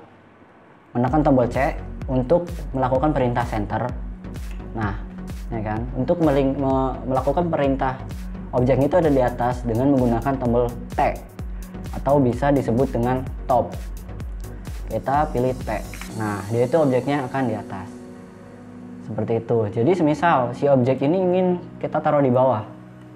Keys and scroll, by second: 4.9 c, 16.4 t.